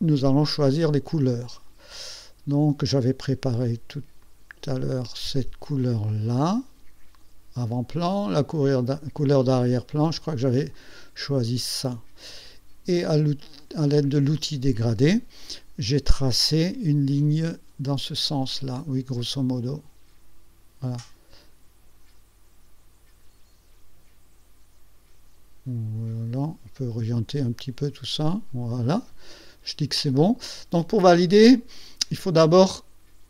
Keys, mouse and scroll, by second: 1.6 click, 4.3 click, 6.4 click, 8.4 click, 8.6 click, 10.1 click, 10.8 click, 12.6 ctrl+scroll down 2, 13.6 ctrl+middle click, 16.7-28.9 drag, 29.3-29.7 ctrl+scroll up 2, 30.2 ctrl+scroll down 2, 30.9-32.4 drag.